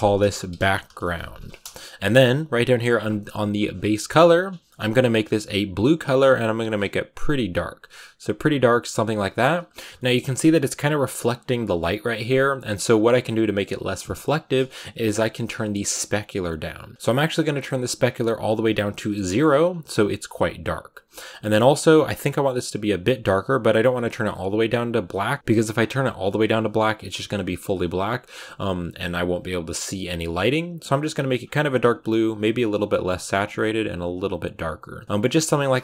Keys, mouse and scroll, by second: 9.8 shift+middle click, 10.1 shift+scroll up 2, 15.5-18.3 drag, 18.3-18.8 scroll down 2, 18.8 click, 19.1 shift+middle click, 19.3 scroll up 2, 22.7 click, 34.9 click, 35.0 shift+middle click, 35.1-35.7 scroll up 3, 35.7 ctrl+s.